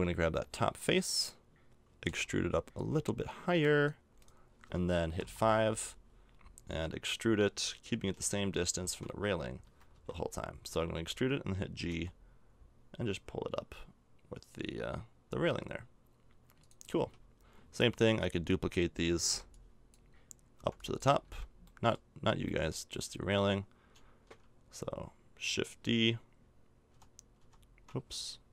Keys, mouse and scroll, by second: 1.0-2.0 right drag, 2.0 e, 5.2 KP_5, 7.9 e, 11.9 g, 16.9 a, 18.0-20.0 right drag, 19.2 b, 20.6 b, 21.2 b, 22.2 b, 26.9 shift+f.